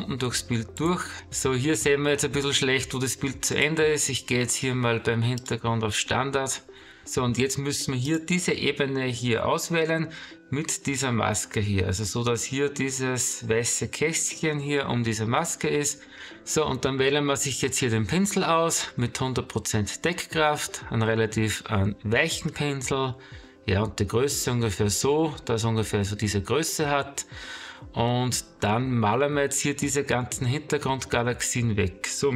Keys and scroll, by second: 2.7 space, 6.4 space.